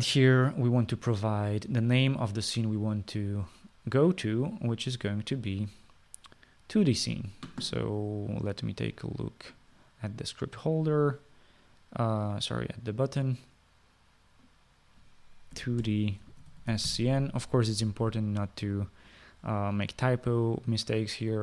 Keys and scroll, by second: 16.6-18.6 typing.